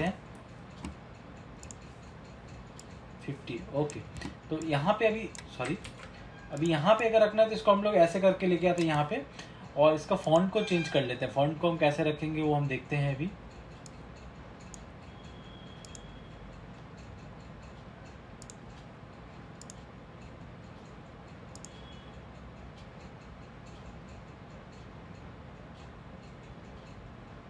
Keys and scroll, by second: 6.0 ctrl+z.